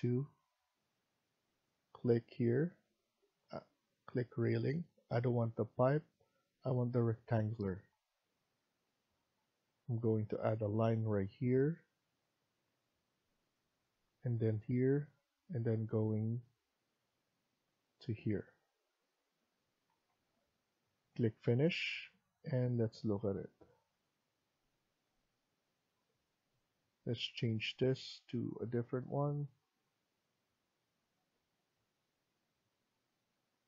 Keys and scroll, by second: 19.5 Escape, 19.8 Escape.